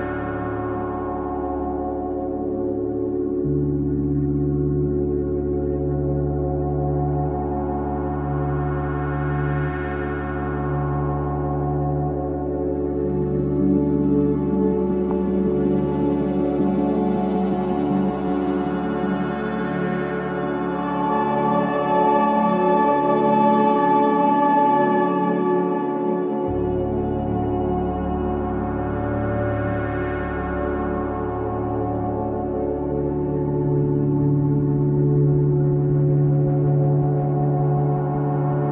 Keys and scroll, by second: 6.1 space, 6.6 ctrl+Page_Down, 19.2 space, 20.4 ctrl+z, 27.1 ctrl+Page_Down, 32.6 F3, 33.0 Escape, 33.2 F2, 37.6 ctrl+z.